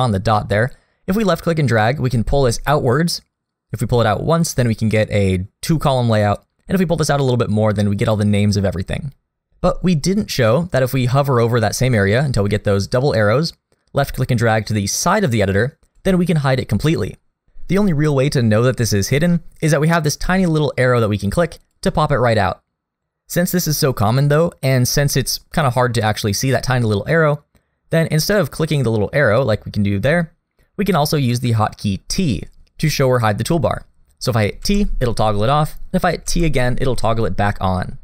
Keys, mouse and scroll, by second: 13.4 click, 21.6 click, 25.3 click, 29.3 click, 34.6 t, 36.3 t.